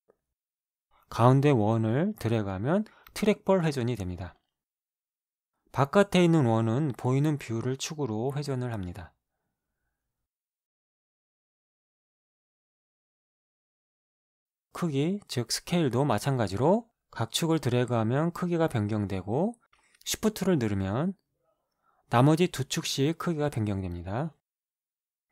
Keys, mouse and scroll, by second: 2.8-10.4 drag, 10.6-14.2 drag, 14.7-16.2 drag, 16.3-17.7 middle drag, 17.7-20.1 drag, 20.9-24.9 shift+drag.